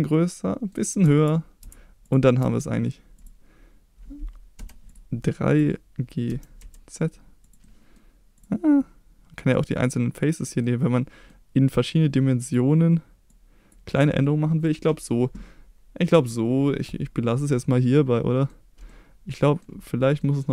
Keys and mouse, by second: 1.0 Tab, 1.6 Tab, 2.0-2.4 drag, 2.4 Tab, 4.5 3, 6.2 g, 6.6 z, 7.4 click, 7.6 middle click, 9.7 click, 10.6 middle click, 12.4 click, 13.3 click, 14.2 middle click, 16.0-18.5 middle drag, 18.8 middle click, 20.2 middle click.